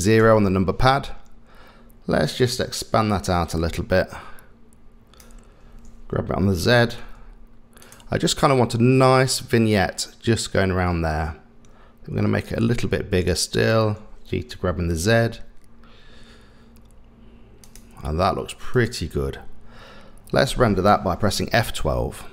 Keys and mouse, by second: 0.2 KP_0, 3.6-5.2 drag, 6.6 g, 12.5-13.7 drag, 14.8 g, 18.8 click.